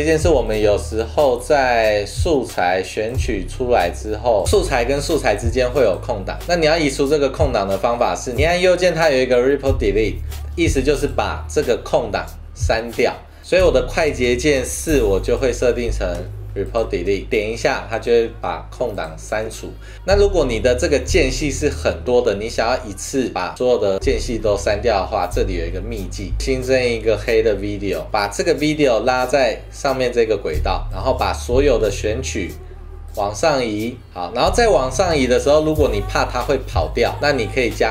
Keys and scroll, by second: 1.6 =, 2.0 -, 4.4 a, 5.6 v, 16.2 super+4, 17.4 super+4, 37.3 super+z.